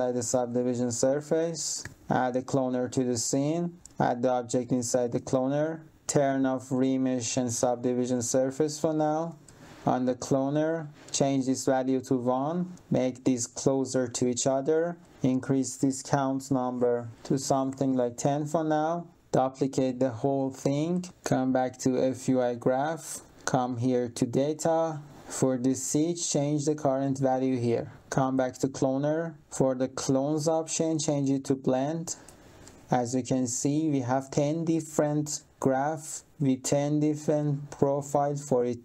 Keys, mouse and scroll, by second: 0.2 alt+click, 1.4 click, 1.8 3, 2.5 click, 3.8 click, 6.5 click, 7.4 click, 9.2 click, 10.9 click, 12.7 click, 17.1 click, 17.4 1, 17.6 0, 17.9 Return, 19.5 ctrl+click, 22.2 click, 23.3 click, 27.5 click, 28.1 click, 30.3 click, 31.6 click, 33.3 click.